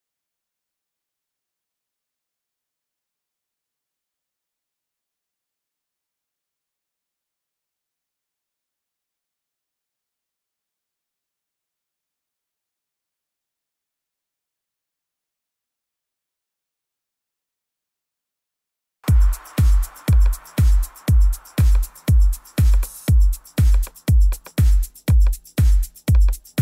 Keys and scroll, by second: 15.0 shift+super+n, 15.6 shift+super+Return, 16.1 Return.